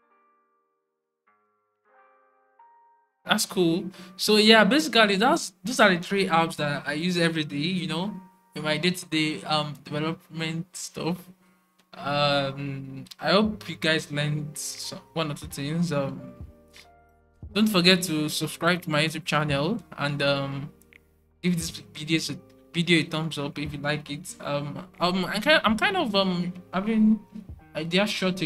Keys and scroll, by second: 14.6 typing.